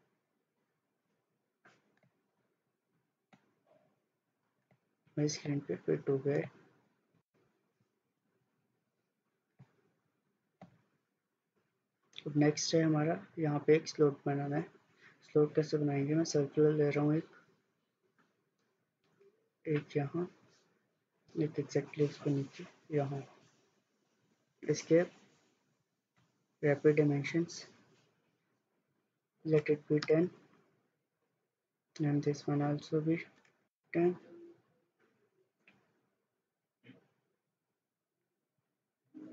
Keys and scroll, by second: 8.3 Escape, 24.6 Escape, 29.4-30.2 typing, 33.4 typing, 33.8 Return.